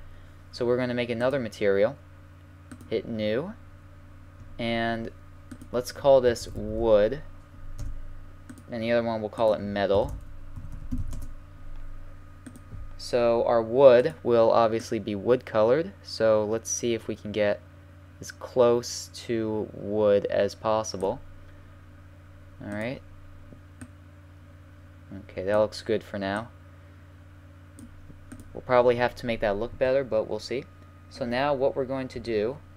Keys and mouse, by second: 1.2-4.5 drag, 4.5-5.6 middle drag, 5.6-7.3 drag, 6.7 o, 8.5-11.2 drag, 12.5-15.9 drag, 22.7-24.5 drag, 29.8 Tab, 30.5 middle click, 32.1 KP_1.